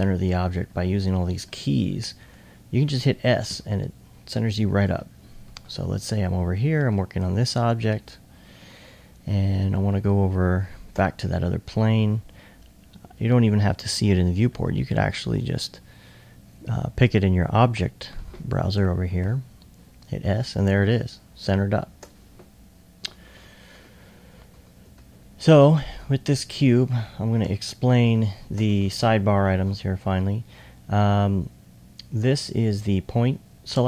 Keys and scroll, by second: 0.0-0.6 typing, 3.5-6.6 typing, 7.9 alt+s, 19.2 s, 19.9 s, 24.8-26.5 typing, 28.0 typing.